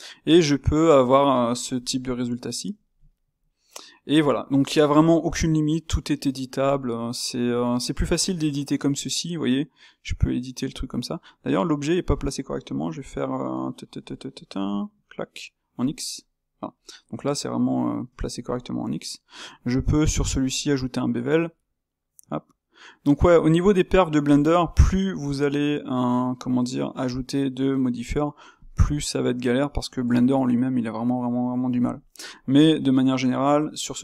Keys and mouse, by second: 1.1 click, 1.4-7.6 middle drag, 7.6 Tab, 8.2 s, 11.6 Tab, 14.8-16.7 alt+right drag, 16.7-22.2 middle drag, 22.2 space, 29.2-34.0 middle drag.